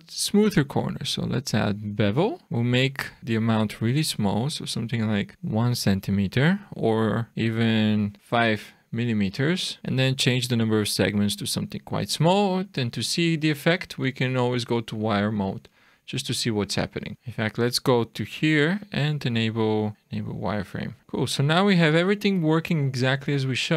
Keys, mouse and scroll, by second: 2.0 click, 2.0 scroll up 2, 2.4 click, 5.7 click, 7.3 Right, 9.8-11.0 scroll up 1, 11.0 click, 11.2 click, 11.5 click, 12.8 click, 14.9 middle click, 16.1 shift+middle click, 17.0 scroll down 6, 17.1 click, 17.1 scroll up 2, 18.2 click, 21.0 alt+a, 21.0 shift+middle click, 21.0 scroll down 2, 21.1-21.5 scroll down 2, 21.6 shift+middle click, 22.8 shift+scroll down 1, 23.3 click.